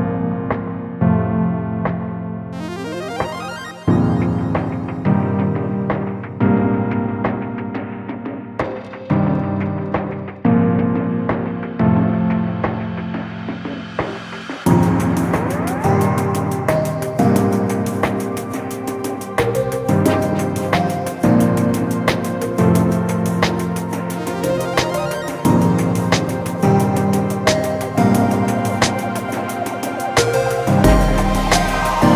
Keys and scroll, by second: 26.0 alt+Delete, 28.3 ctrl+z.